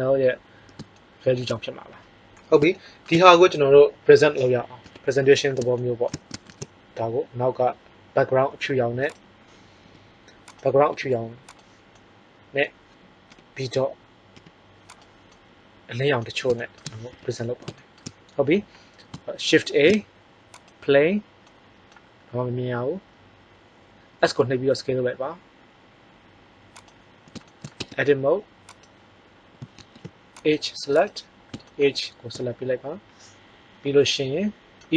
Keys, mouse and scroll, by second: 4.8 KP_1, 6.4 shift+z, 9.0-9.9 right drag, 9.7 g, 10.8 r, 13.3 KP_7, 14.3 g, 15.0 drag, 15.2-15.6 middle drag, 17.1 KP_1, 19.7 shift+a, 24.2 s, 27.7 Tab, 29.8 ctrl+Tab, 30.2 click.